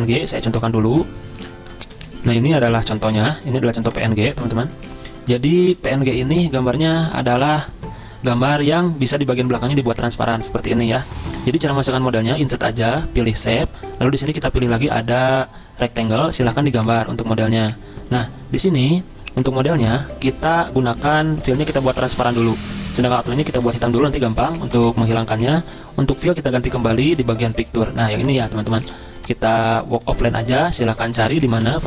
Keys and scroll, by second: 1.8 F10, 27.6 alt+Tab, 28.8 ctrl+c, 31.6 ctrl+v, 31.7 ctrl+Return.